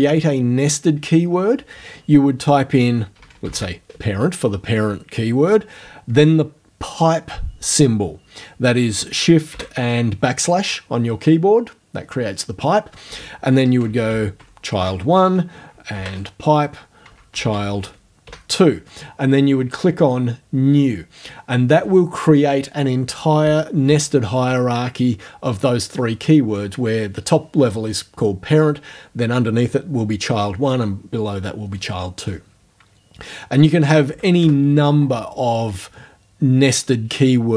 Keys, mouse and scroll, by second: 2.5-4.0 typing, 9.5 shift+\, 13.4-18.8 typing, 34.1 shift+Home, 34.4 shift+BackSpace.